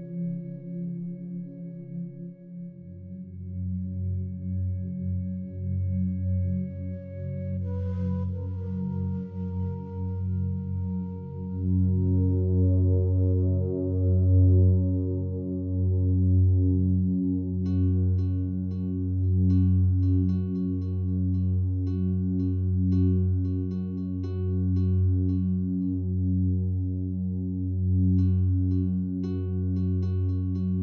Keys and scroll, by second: 13.5 shift+F2, 13.8 F9.